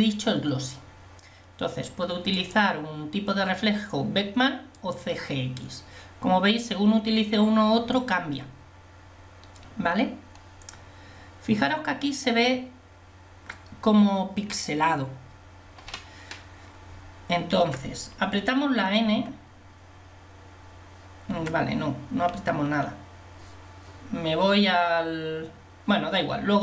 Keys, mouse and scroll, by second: 17.9 t, 19.2 t, 21.4 t.